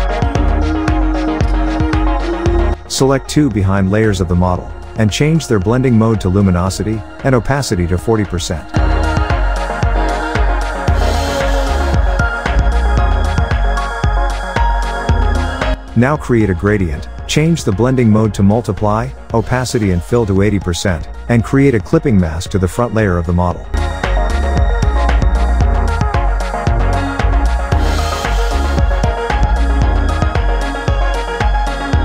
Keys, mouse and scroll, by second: 1.6 click, 2.3 shift+click, 3.3-7.3 drag, 5.5 click, 8.4 click, 10.3 click, 11.0 alt+scroll up 1, 11.4 space, 11.5-12.0 click, 12.0 space, 12.7 click, 15.9-23.6 drag, 21.9 drag, 24.4 click, 25.5 alt+click, 29.2-31.1 drag.